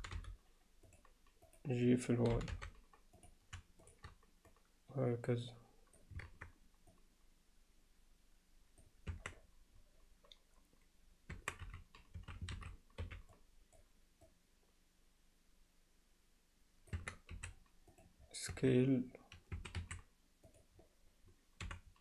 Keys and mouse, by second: 0.0 g, 2.3 g, 3.8 shift+click, 4.6-6.2 drag, 6.3 shift+Tab, 7.0-8.9 drag, 9.1 Tab, 11.4 Tab, 11.6 z, 12.2 a, 13.0 b, 14.3-17.0 drag, 17.0 Tab, 17.4 s, 18.6 Tab, 19.6 a, 19.8 s, 21.7 f.